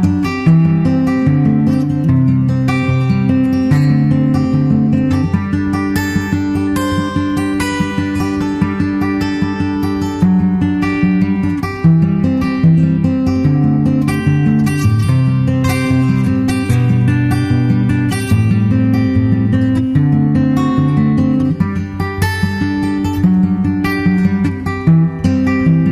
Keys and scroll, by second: 0.3 super+Tab, 1.0 super+Tab, 15.6 super+Right.